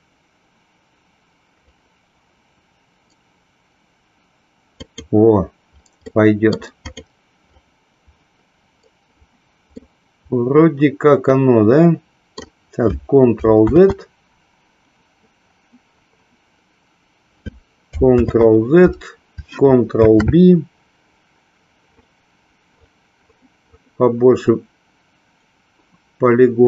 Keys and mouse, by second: 4.7 click, 6.1 middle click, 6.7 click, 9.9-12.5 middle drag.